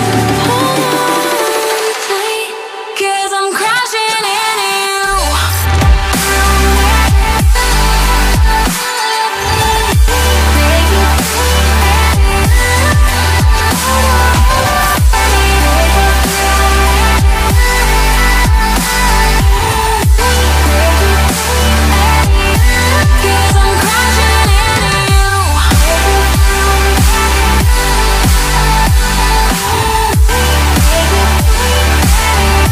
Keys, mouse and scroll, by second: 2.3 right click, 9.4 ctrl+click, 13.1 ctrl+click, 14.5 right click, 22.6 ctrl+click, 26.1 ctrl+click, 29.3 ctrl+click.